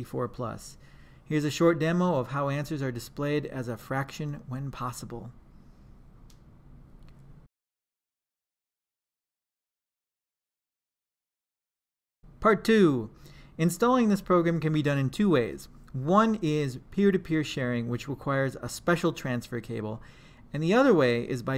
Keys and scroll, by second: 2.7 Return, 5.1-6.8 typing, 6.5 Return, 7.0 Return.